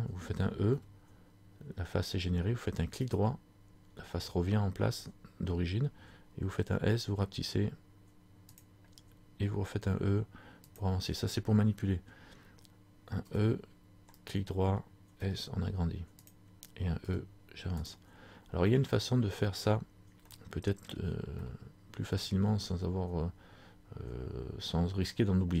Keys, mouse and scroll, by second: 0.8 e, 10.8 click, 11.8 scroll down 2, 13.4 e, 17.2 e, 18.0 click, 18.8 middle click, 18.8 scroll up 1, 20.4 shift+middle click, 21.6 middle click, 25.2 shift+middle click.